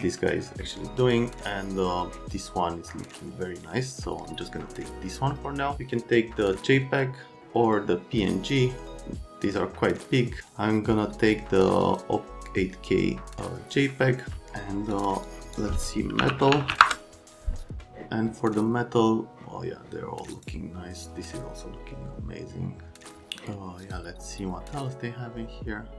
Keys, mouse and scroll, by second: 11.8 click, 14.9 click, 15.3 click, 16.0-17.2 typing, 20.3 click, 23.9 click.